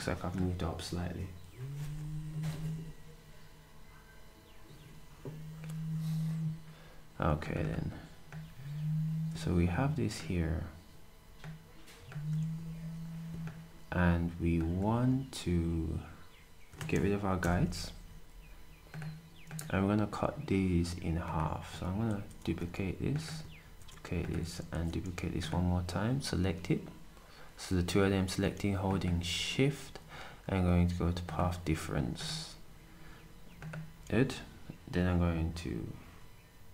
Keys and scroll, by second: 12.4 s, 17.4 \, 23.6 d.